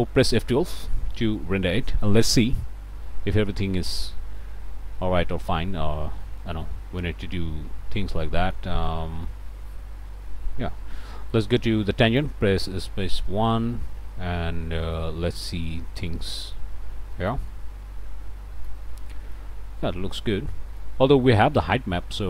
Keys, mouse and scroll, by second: 0.2 click, 1.1 F12, 6.3-7.8 drag, 7.8 scroll down 1, 8.2 click, 8.7 scroll up 1, 9.0 middle click, 9.2 shift+click, 9.8 shift+scroll up 2, 10.1 click, 10.9 click, 12.1 click, 12.5 1, 13.0 Return, 14.5 scroll up 2, 14.8 scroll down 2, 14.9 click, 15.8 scroll down 2, 17.1-18.9 shift+middle drag, 19.1 middle click, 19.8-21.0 middle drag.